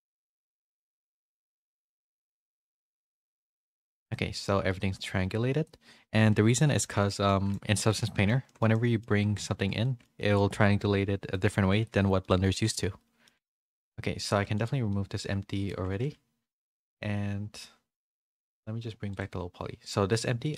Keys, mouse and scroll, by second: 5.0 Tab, 6.1 a, 6.3 a, 6.5 middle click, 7.2 shift+middle click, 7.2 a, 7.6 shift+middle click, 8.0 a, 8.1 middle click, 8.4 middle click, 8.7 middle click, 9.8 middle click, 9.8 a, 10.1 shift+middle click, 11.3 middle click, 12.2 middle click, 12.2 a, 12.9 middle click, 12.9 a, 14.2 click, 14.2 a, 14.4 x, 14.8 middle click, 15.8 a, 19.1-20.1 drag.